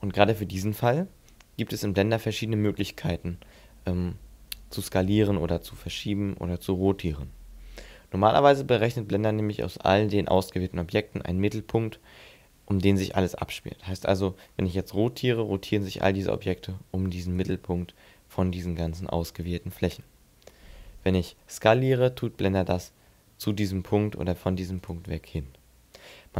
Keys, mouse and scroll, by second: 0.2 middle click, 8.1 middle click, 14.8 r, 17.2 right click, 21.4 s, 24.7 right click.